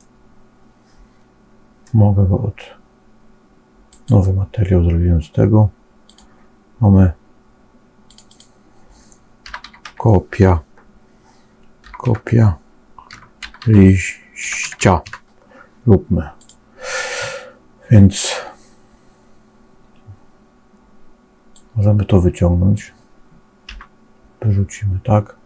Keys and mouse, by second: 0.0-1.7 middle drag, 3.8 click, 6.0-16.4 drag, 21.4-22.7 drag, 23.6 Delete.